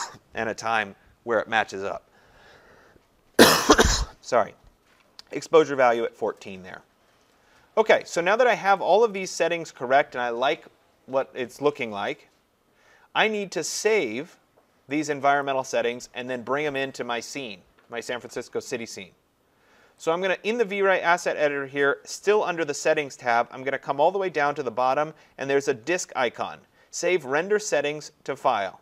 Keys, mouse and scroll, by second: 8.9-14.0 drag, 15.5 click, 16.8-20.6 drag, 20.6-25.7 drag.